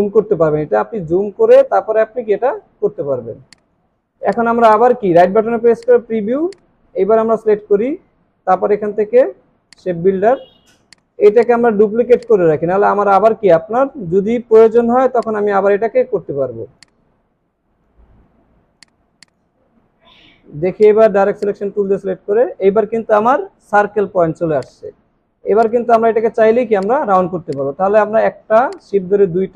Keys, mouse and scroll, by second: 1.8 alt+scroll up 1, 2.4 alt+scroll down 1, 3.4 alt+scroll down 1, 3.9 alt+scroll up 3, 11.4 double click, 19.2 double click, 19.6 alt+scroll up 1, 24.3 alt+scroll down 1, 24.6 space, 28.7 shift+click.